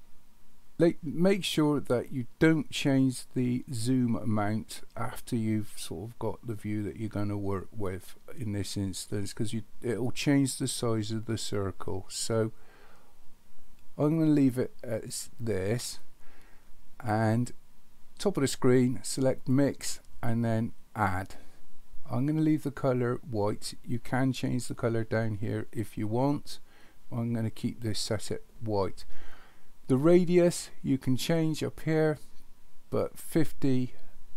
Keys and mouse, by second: 19.4-21.1 drag.